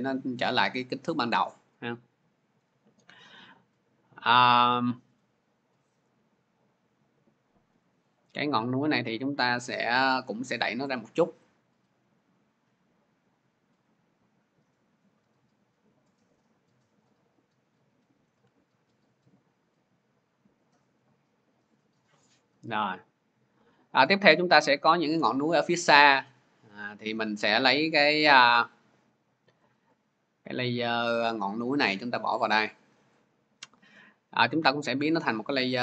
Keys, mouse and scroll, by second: 5.8-12.8 drag, 16.8-20.7 drag, 21.4 shift+click, 26.2 click, 27.5-34.5 drag, 35.1 click.